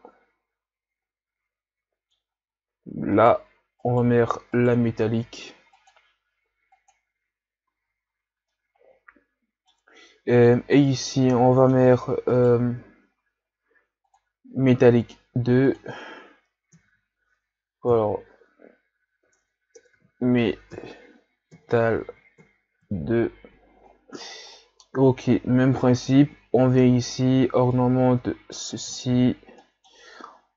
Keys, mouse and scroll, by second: 2.2 scroll up 3, 3.3 right click, 3.9 right click, 4.6 right click, 7.2 click, 7.8 a, 8.6-11.0 middle drag, 11.0-11.4 scroll down 1, 11.4-12.4 middle drag, 12.4 right click, 14.6-22.9 drag, 25.0-25.4 scroll up 3, 27.9-29.7 drag, 29.7-30.5 middle drag.